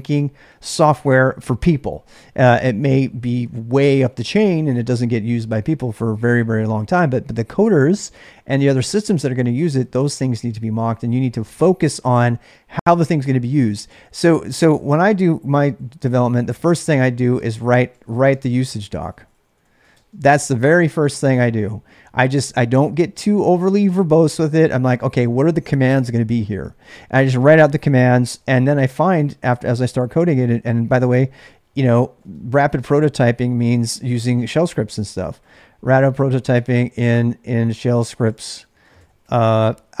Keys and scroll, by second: 14.8 ctrl+[, 14.9-21.9 typing, 31.5-40.0 typing.